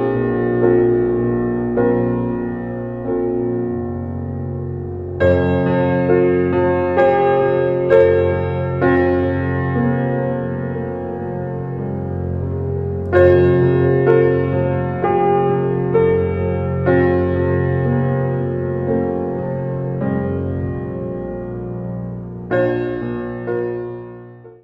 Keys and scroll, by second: 10.2 ctrl+0.